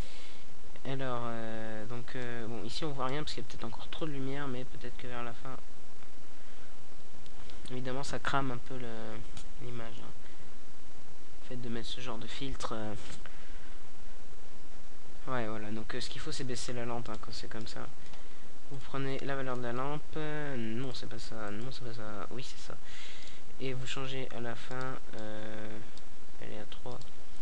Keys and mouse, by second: 0.0 Escape, 1.5-2.7 right drag, 3.0-5.3 right drag, 5.3-14.8 drag, 14.8 right click.